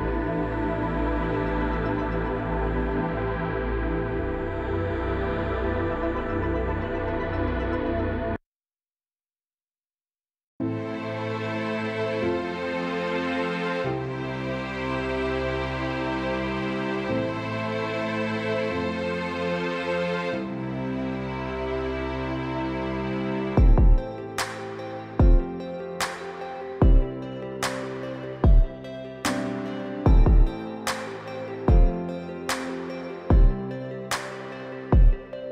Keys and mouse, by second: 0.2-1.3 middle drag, 1.6-2.1 middle drag, 2.5 click, 3.1 g, 4.4 g, 5.9 click, 6.3-6.7 middle drag, 6.9-7.3 shift+drag, 7.3-7.8 middle drag, 8.8-9.2 shift+middle drag, 9.6 middle click, 10.9 middle click, 13.4 middle click, 14.8 shift+click, 16.8 click, 19.8-20.7 drag, 21.1 shift+d, 27.3 g, 29.2-30.0 middle drag, 30.8-31.3 shift+middle drag, 32.0 g, 33.7 g, 35.2-35.5 middle drag.